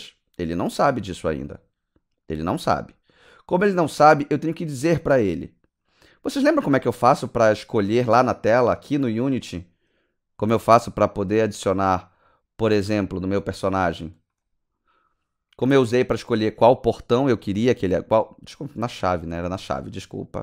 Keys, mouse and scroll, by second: 1.4 click, 3.5 click, 9.3 click, 14.2 click, 15.7 click, 16.1 click, 17.2-18.2 scroll down 8, 18.9-19.8 scroll down 8.